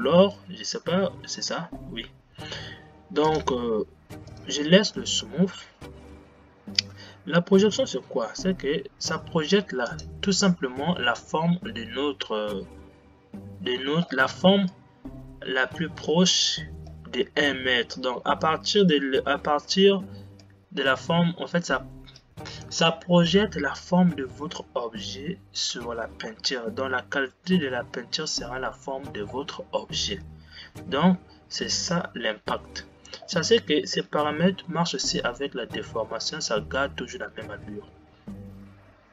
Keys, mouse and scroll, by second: 4.7 click, 14.7 scroll up 1, 14.8-39.1 middle drag.